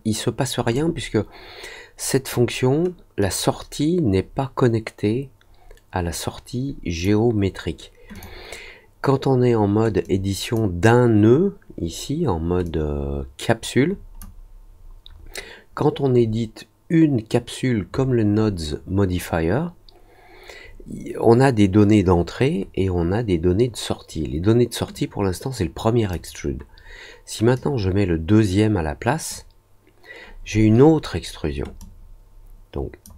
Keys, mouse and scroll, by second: 0.7-2.2 drag, 3.1-7.0 drag, 8.1 click, 10.0 click, 12.6-14.1 drag, 24.9-26.1 drag, 27.5-29.2 drag, 31.7-33.0 drag.